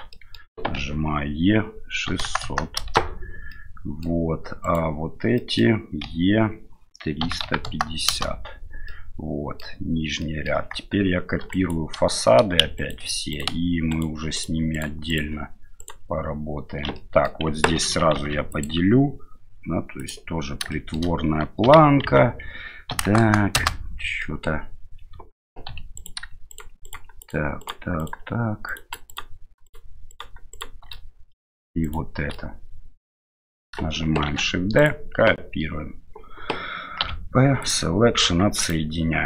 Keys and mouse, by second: 0.1 middle click, 0.8 e, 3.6 middle click, 4.6 right click, 5.4 middle click, 6.0 e, 8.9 middle click, 10.3 middle click, 11.5 right click, 12.8 ctrl+right click, 13.3-14.5 ctrl+right drag, 14.7 ctrl+right click, 15.1 ctrl+right click, 15.8 ctrl+right click, 17.0 middle click, 18.2 ctrl+r, 20.8 middle click, 21.6 g, 24.3 middle click, 25.7 3, 26.0 right click, 26.5 shift+right click, 26.9 shift+right click, 27.6 shift+right click, 28.0-29.4 shift+right drag, 29.7 shift+right click, 30.5 shift+right click, 30.9 middle click, 32.3-33.6 middle drag, 34.3 shift+d, 37.0 p, 38.2 Tab, 38.6 right click.